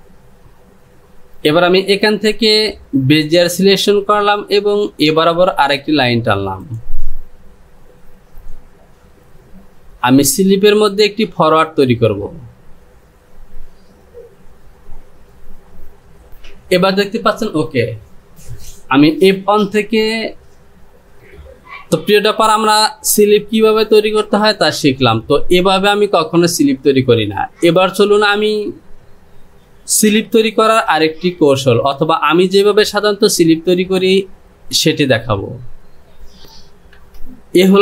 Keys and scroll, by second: 36.6 shift+z.